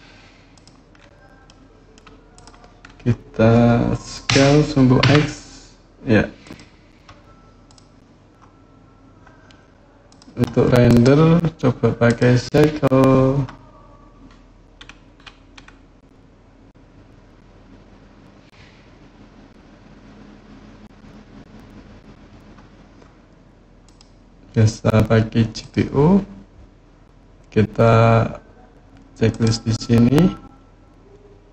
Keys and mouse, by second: 0.3 click, 1.2-1.7 middle drag, 4.1 s, 4.8 x, 6.2 click, 7.4 click, 9.9 click, 10.7-12.2 drag, 23.6-25.8 drag, 29.1 click.